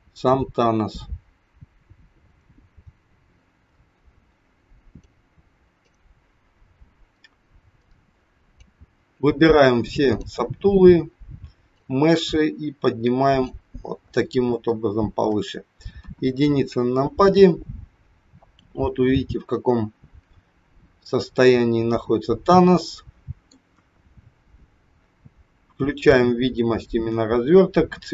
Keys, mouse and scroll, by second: 7.8 click, 10.1 click, 14.7 shift+middle click, 16.0 KP_1, 16.5-16.8 scroll up 3, 18.0-18.4 scroll up 4, 19.2 middle click, 23.6 KP_1, 24.1-24.5 scroll down 4, 26.6 click.